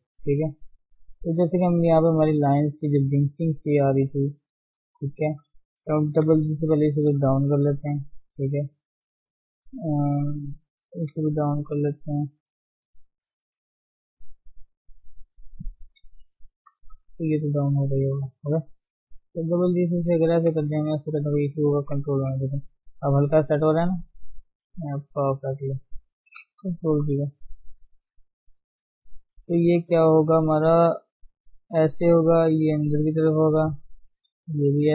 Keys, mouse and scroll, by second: 0.0 g, 1.5 click, 3.3 click, 3.5 shift+z, 4.4 click, 5.4 shift+z, 6.3 g, 8.2 click, 8.4-11.1 typing, 9.0 click, 10.0 shift+click, 11.9-12.6 scroll up 3, 12.2 shift+middle click, 12.6 shift+z, 13.4 click, 14.0 click, 14.8 shift+click, 15.8 shift+z, 16.7 g, 18.5 click, 18.8 g, 20.5 g, 21.2 Tab, 21.4-21.8 scroll down 4, 21.8 ctrl+1, 22.4-24.4 middle drag, 24.4 scroll up 1, 24.5-26.9 middle drag, 26.9 ctrl+0, 27.2 middle click, 27.7 Tab, 28.1-29.2 middle drag, 29.2-29.5 scroll up 1, 29.5 click, 29.8-31.4 middle drag, 31.4 g, 32.4 click, 32.6 g, 33.5 middle click, 34.2 click, 34.3 g.